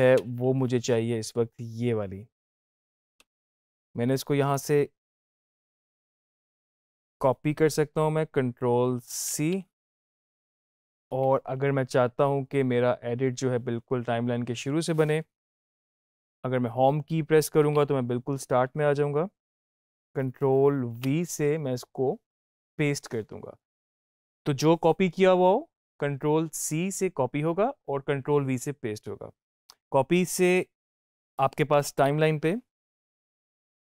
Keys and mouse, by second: 0.0 space, 4.4 click, 9.2 ctrl+c, 17.4 Home, 20.7 ctrl+v, 31.8 End, 33.6 click.